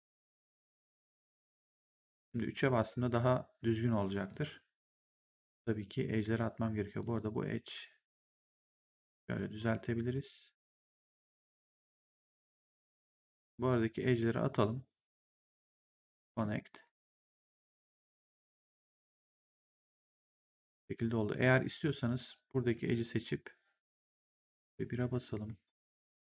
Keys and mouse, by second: 1.7 right click, 2.1 3, 2.5 click, 4.2 click, 4.8 1, 6.2 right click, 6.9 click, 7.6 r, 8.5 click, 11.4 right click, 14.4 click, 15.6 click, 16.2 w, 16.5 right click, 16.9 3, 17.6 click, 19.9 click, 21.3 right click, 22.7 click, 24.3 1, 25.7 shift+click.